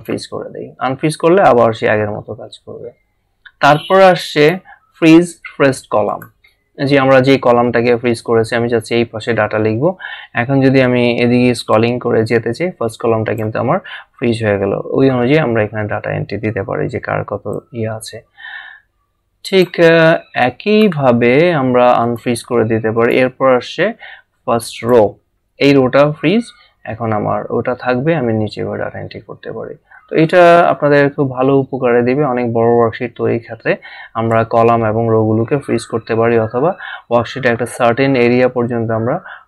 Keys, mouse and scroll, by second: 4.3 click, 6.1 click, 11.7 click, 17.5 click, 22.5 click, 24.7 click, 26.3 scroll down 1.